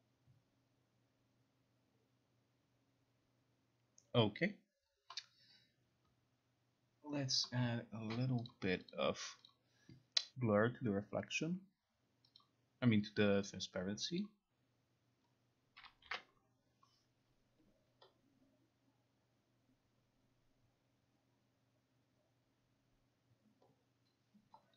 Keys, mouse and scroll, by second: 8.6 click, 9.0 click, 9.6 click, 12.4 click, 14.3 click, 15.9 click, 16.2 ctrl+r.